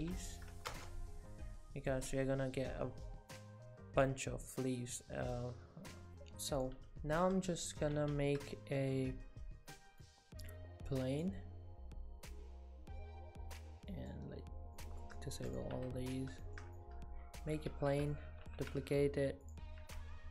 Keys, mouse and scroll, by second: 3.3 click, 4.4 click, 6.6 click, 8.0 shift+a, 13.9 click, 14.8 middle click, 15.2 shift+middle click, 15.5 click, 15.8 Tab, 16.1 scroll up 5, 16.4 shift+middle click, 16.8 middle click, 17.7 shift+d, 18.5 r, 20.2 ctrl+z.